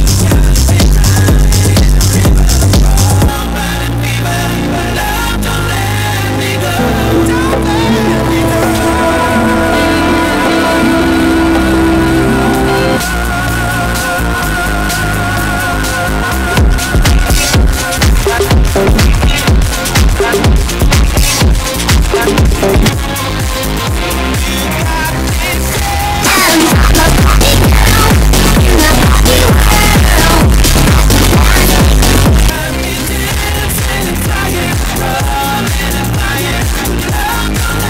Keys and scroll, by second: 3.2 Page_Down, 13.1 Page_Down, 22.8 Page_Down, 32.4 Page_Down.